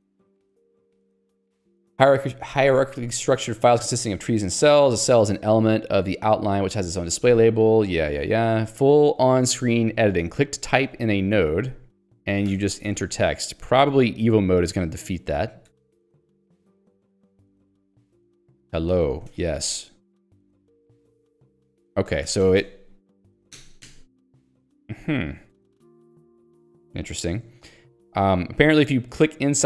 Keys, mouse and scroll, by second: 0.4 j, 9.6 k, 10.4 j, 12.6 click, 15.7 ctrl+z, 17.6 click, 18.4-22.3 typing, 20.9 click, 24.6 Left, 25.5 Delete, 26.6 Left, 26.8 Delete, 28.2 click.